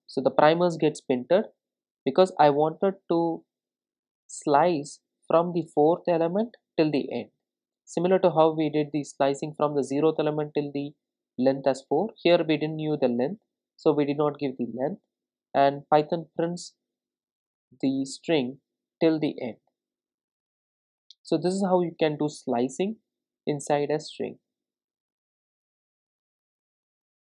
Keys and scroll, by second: 0.2 ctrl+r.